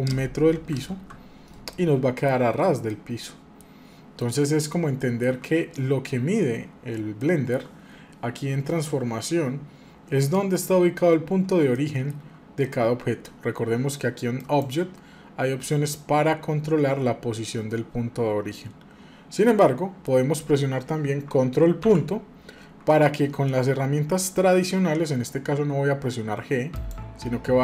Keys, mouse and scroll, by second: 1.7-5.4 middle drag, 7.2-10.3 shift+middle drag, 11.7-14.4 shift+middle drag, 14.4-19.6 drag, 19.6-21.4 middle drag, 21.8 ctrl+., 26.7-27.6 drag.